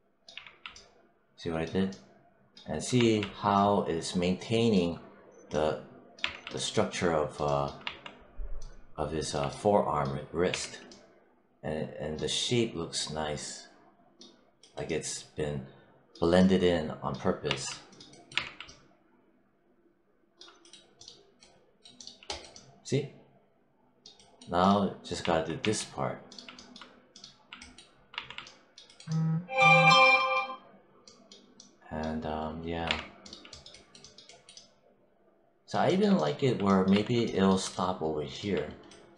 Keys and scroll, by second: 0.2 3, 2.9 1, 6.1 3, 7.7 1, 10.3 3, 18.2 3, 25.1 1, 28.0 1, 32.7 3, 36.8 1.